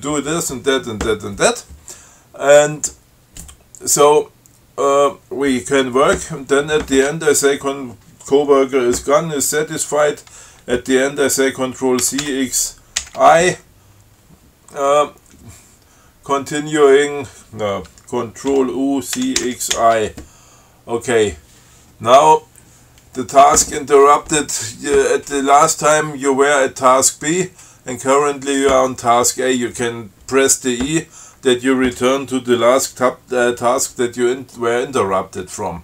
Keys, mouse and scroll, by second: 12.3 ctrl+c, 12.5 ctrl+x, 13.3 ctrl+i, 18.8 ctrl+u, 19.5 ctrl+c, 19.7 ctrl+x, 20.0 ctrl+i.